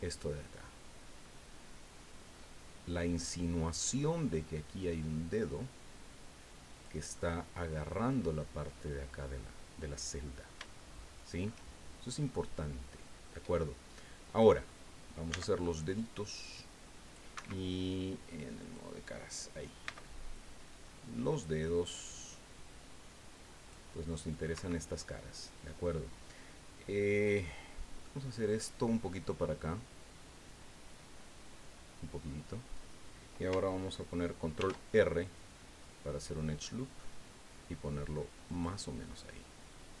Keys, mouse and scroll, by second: 0.5 click, 1.4-2.7 scroll up 3, 3.3-3.6 scroll down 1, 4.0 scroll down 1, 7.1 click, 9.3 click, 10.2 click, 12.3-13.4 drag, 14.0 click, 15.3 c, 16.2 scroll down 2, 16.7 click, 17.3 Escape, 18.6 click, 19.8 c, 20.3-23.9 drag, 24.3 click, 24.5 Escape, 28.0 click, 30.4-32.9 drag, 34.6 ctrl+r, 35.2 click, 38.5 click, 39.0-40.0 drag.